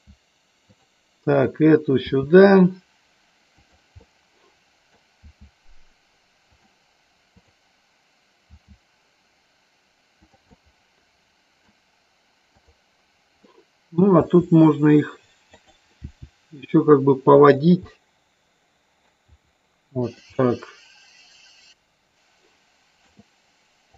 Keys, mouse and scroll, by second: 0.8 click, 1.5 click, 2.2 r, 3.7 click, 4.2 middle click, 5.3 r, 6.7 click, 7.6 click, 8.7 r, 10.7-11.8 middle drag, 13.6 middle click, 14.3 r, 15.7 click, 16.1 g, 17.7 click, 17.9-19.2 middle drag, 17.9 scroll up 1, 19.4 g, 20.2 click, 20.4 scroll up 1, 20.5-23.2 middle drag, 23.2 scroll down 1.